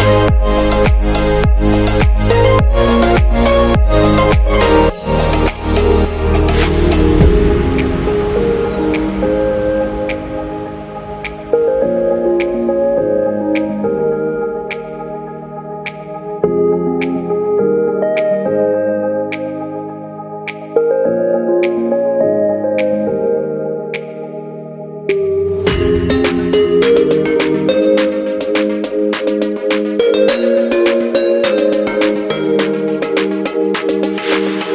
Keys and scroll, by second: 2.4 super+t, 23.6 super+z, 27.0 super+z, 32.9 super+d.